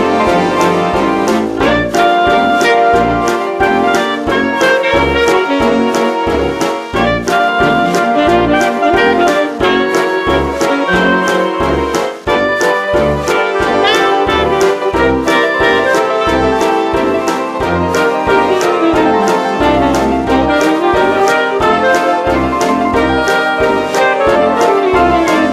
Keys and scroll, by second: 8.8 ctrl+alt+z, 9.4 space, 12.0 space, 12.8 ctrl+alt+z, 16.5 ctrl+u, 18.0-19.5 typing, 21.6 ctrl+u, 22.1 ctrl+alt+z, 23.4 ctrl+alt+z, 24.8 ctrl+alt+z.